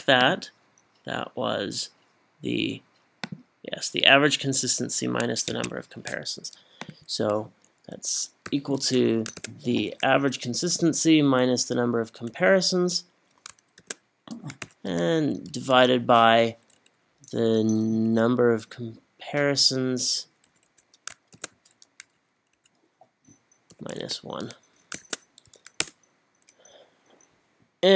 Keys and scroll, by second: 5.5 Escape, 8.5 =, 9.4 shift+9, 10.2 Up, 11.1 -, 11.6 Up, 12.4 Up, 13.8 shift+0, 14.6 /, 17.6 Up, 18.0 Up, 20.5 BackSpace, 21.3 shift+9, 22.0 Up, 22.5 Up, 23.7 -, 24.0 1, 25.9 Return.